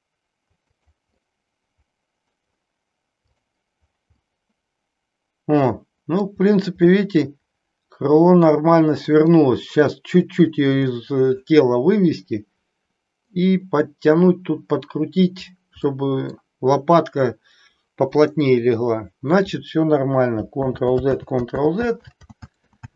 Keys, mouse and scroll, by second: 1.2-2.4 middle drag, 3.4 click, 4.2-6.2 middle drag, 7.0-9.3 middle drag, 11.0-13.3 middle drag, 16.0 middle click, 20.9 ctrl+z, 21.7 ctrl+z, 22.5 ctrl+z, 22.7 ctrl+z.